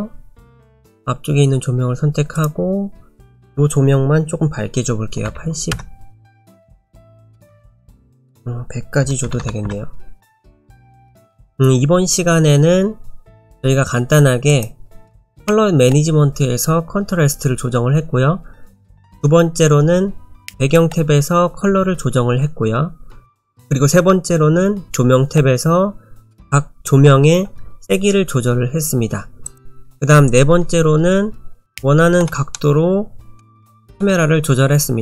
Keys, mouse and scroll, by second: 0.6 click, 3.4 click, 7.9 click, 9.4 KP_0, 14.5 click, 29.5 click, 31.7 middle click, 32.5 middle click, 33.7 shift+middle click.